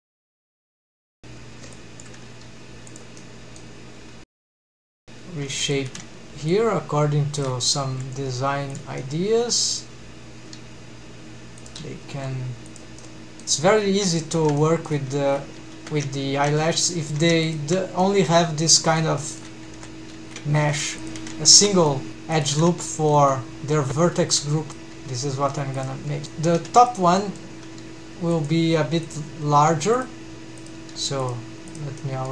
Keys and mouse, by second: 0.7 r, 1.8 click, 2.3 g, 2.9 drag, 3.2-3.6 middle drag, 4.0 g, 4.7 alt+a, 8.1 r, 9.0 middle click, 10.4 g, 11.7 click, 12.4 r, 13.0-13.4 middle drag, 14.2 shift+middle click, 14.6-14.9 middle drag, 15.1 alt+a, 15.7 alt+a, 16.6 alt+z, 18.0-19.0 middle drag, 19.2 middle click, 20.0 2, 20.1 alt+a, 21.2 g, 22.9 middle click, 24.9 g, 26.2 middle click, 26.2 3, 26.7 1, 26.9 click, 27.2 middle click, 27.8 g, 28.4 click, 29.1 click, 29.5 g, 30.0 click, 31.3 g, 32.0 middle click.